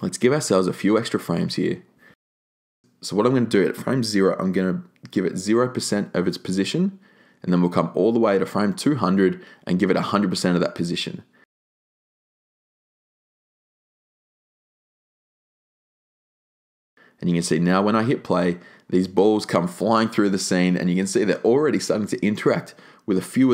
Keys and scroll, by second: 1.4-2.3 typing, 11.9-12.9 typing.